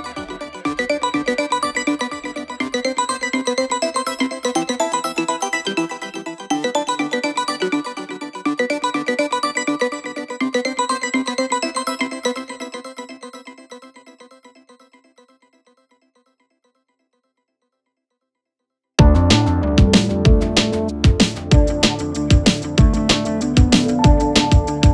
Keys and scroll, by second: 3.9 4, 4.2 2, 10.4 4, 13.7 3, 14.9 4.